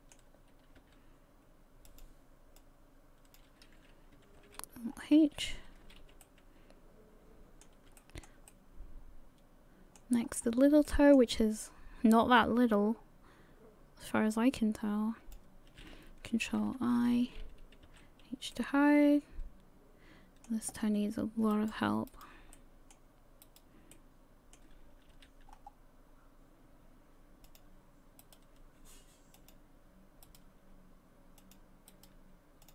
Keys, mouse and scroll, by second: 0.8 r, 2.6 click, 4.4 alt+h, 4.8 scroll down 5, 5.2 a, 5.8 a, 6.0 a, 6.2 middle click, 8.0 shift+middle click, 8.5 middle click, 10.2 scroll up 3, 10.9 shift+middle click, 13.4 click, 16.8 ctrl+i, 17.9 h, 18.5 middle click, 20.8 scroll up 1, 21.5 right click, 22.1 right click, 22.5 middle click, 23.4 right click, 23.9 middle click, 25.2 g, 28.2 right click, 28.6 g, 30.3 right click, 30.5 g, 31.9 right click, 32.2 g.